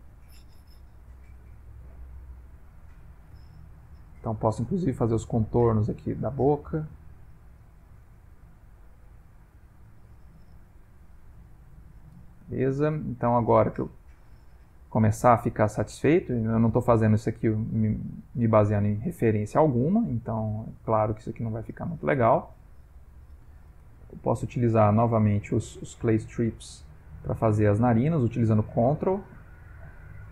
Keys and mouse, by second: 0.9 click, 1.5 click, 2.0 click, 2.7 click, 3.7 click, 4.2 click, 4.7 click, 5.1 click, 5.5 click, 5.9 click, 6.3 click, 6.8 click, 7.2 click, 8.0 click, 8.6 click, 9.1 click, 9.6 click, 10.7 ctrl+middle click, 11.1 ctrl+middle click, 12.3 shift+middle click, 12.6 shift+middle click, 12.9 middle click, 14.4 ctrl+middle click, 14.9 ctrl+middle click, 15.3 middle click, 17.0 middle click, 17.3 ctrl+middle click, 18.3 middle click, 19.1 middle click, 19.7 ctrl+middle click, 20.1 shift+middle click, 20.7 shift+middle click, 20.8 ctrl+middle click, 21.6 middle click, 23.8 ctrl+space, 24.5 ctrl+space, 25.1 shift+space, 26.8 middle click, 28.1 ctrl+click.